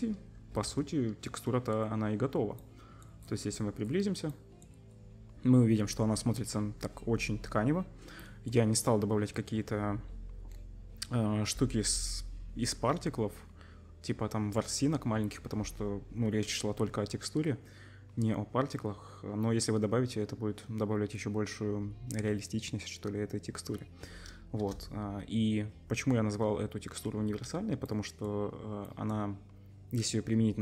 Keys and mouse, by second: 0.6 z, 24.6 KP_0, 28.8-30.6 middle drag.